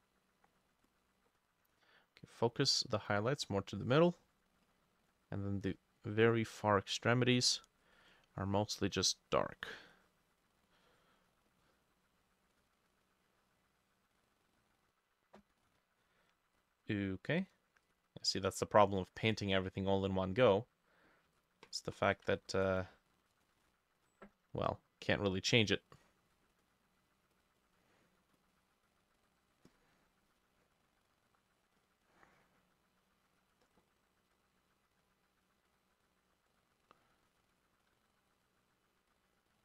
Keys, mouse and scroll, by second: 5.1-7.6 drag, 17.9 double click, 22.7 ctrl+click, 23.4 ctrl+click, 24.0-25.4 drag, 27.6-38.5 drag.